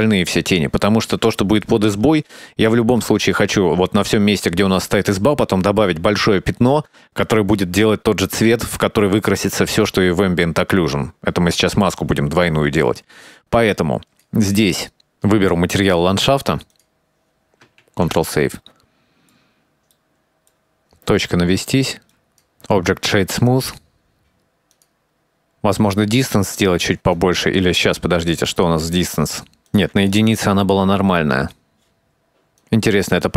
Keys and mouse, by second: 1.2 shift+middle click, 11.5 shift+middle drag, 12.2 click, 13.2 shift+middle click, 14.8 middle click, 16.8 click, 18.1 ctrl+s, 18.1 middle click, 18.3 middle click, 18.5-19.6 drag, 19.8 shift+middle click, 20.1 shift+middle click, 20.3 middle click, 21.2 middle click, 21.2 KP_Decimal, 22.4-23.9 drag, 24.3 click, 24.6 click, 24.6 click, 24.7 click, 25.0 click, 25.1 click, 25.3 click, 26.5-29.7 shift+drag, 29.8 click, 32.2 click, 32.4 click, 32.9 click, 33.1 click, 33.2 click.